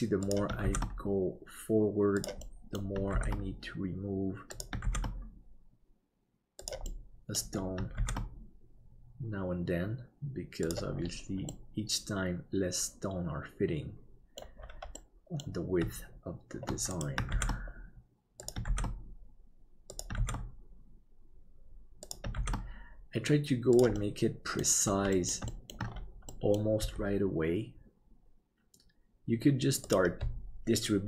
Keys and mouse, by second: 2.5 middle click, 7.0 middle click, 8.0 shift+d, 11.6-14.5 middle drag, 15.1 middle click, 17.3 shift+d, 20.3 shift+d, 24.1 middle click, 25.3 middle click, 25.6 shift+middle click, 26.3 middle click, 26.8 g.